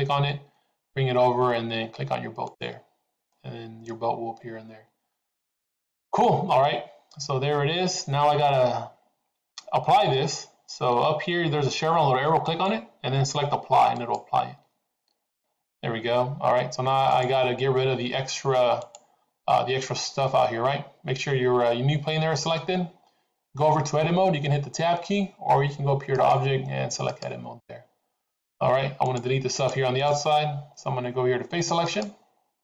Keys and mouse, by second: 12.3-15.1 drag, 17.0 click, 18.8 click, 26.1-27.3 drag, 28.9 click, 29.4 click, 29.9 click, 32.5 click.